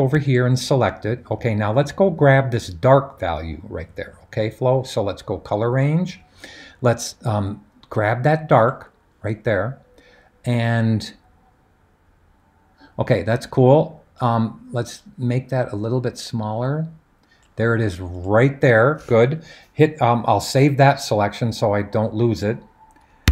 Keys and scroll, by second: 23.2 2.